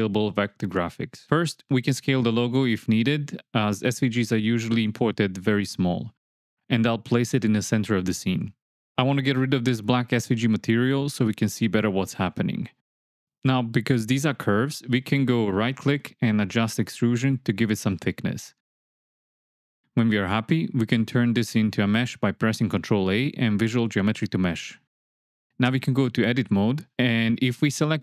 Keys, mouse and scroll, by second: 2.1 click, 3.7 s, 3.9 KP_1, 4.0 KP_0, 4.5 KP_Enter, 5.3 KP_7, 7.2 g, 9.7 ctrl+a, 12.0-12.6 drag, 14.6-16.7 right drag, 16.7 click, 17.9-20.0 shift+middle drag, 20.0 shift+click, 20.4-21.1 middle drag, 23.4 ctrl+a, 26.4-26.8 middle drag, 27.1 Tab.